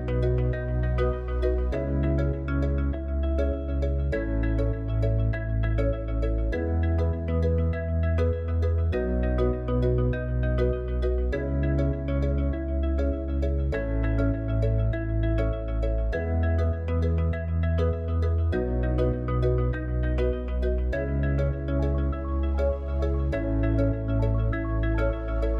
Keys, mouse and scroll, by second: 3.1 click, 6.9-10.9 drag.